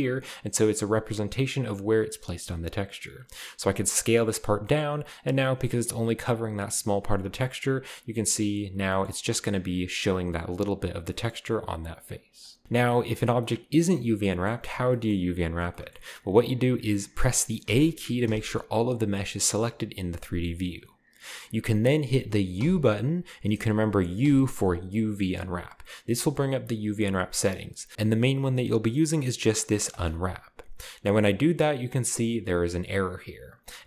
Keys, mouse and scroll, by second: 3.5 s, 7.0 right click, 7.7 s, 8.3 click, 8.8 middle click, 9.1-9.5 scroll up 1, 9.5 middle click, 9.5-10.6 scroll down 1, 11.1-12.6 middle drag, 12.0-12.6 scroll down 1, 13.4-15.7 middle drag, 17.6 a, 18.2 a, 19.6 g, 20.0-21.0 right drag, 22.5 u, 24.2 u, 29.9-31.1 drag.